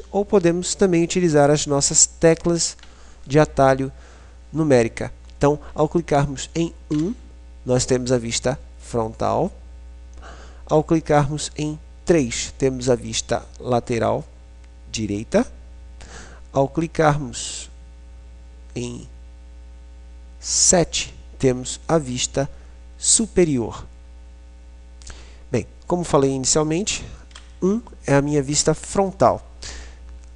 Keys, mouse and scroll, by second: 6.7 KP_1, 11.7 KP_3, 16.0 KP_7, 27.5 KP_1.